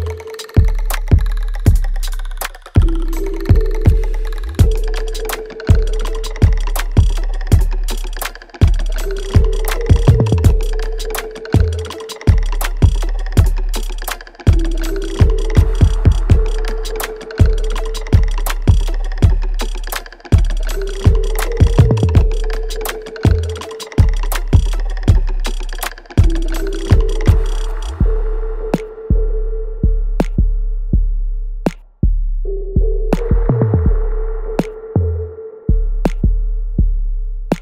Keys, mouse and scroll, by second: 1.4-6.7 drag, 6.7 alt+middle click, 7.1 alt+right click, 7.9 click, 8.3 click, 9.6 click, 10.2 alt+middle click, 11.5-13.7 drag, 13.7 right click, 14.3 click, 14.6-16.1 alt+right drag, 16.1 click, 18.1 ctrl+s, 18.2 ctrl+scroll down 2, 18.7 alt+right click, 19.0 alt+click, 20.4 alt+middle click, 20.8 alt+right click, 21.2-23.1 alt+drag, 23.1 alt+right click, 23.5 alt+middle click, 24.2 alt+click, 24.7 alt+right click, 25.1 alt+click, 25.6 alt+right click, 26.1 click, 26.3 alt+middle click, 26.7 alt+right click, 27.9-31.7 drag, 32.1-32.7 scroll down 1, 32.7 scroll up 1, 33.0 click, 33.7-35.0 scroll up 1, 35.0 click.